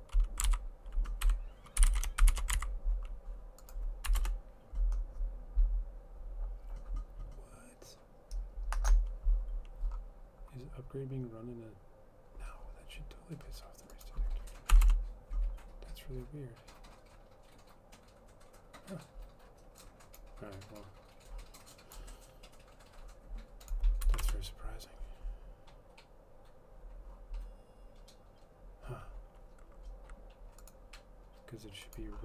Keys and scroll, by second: 0.6 ctrl+v, 1.4 Home, 1.7-3.0 typing, 4.3 Return, 4.6-5.3 typing, 14.9 Return, 15.0 Return, 24.4 shift+Return.